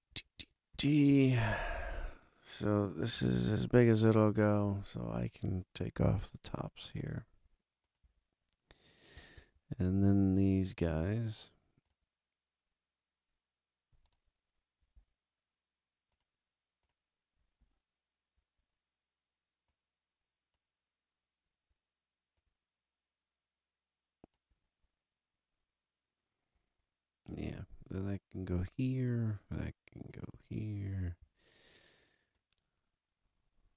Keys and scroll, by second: 3.1 alt+super+], 6.0 a, 28.6 a, 30.3 a.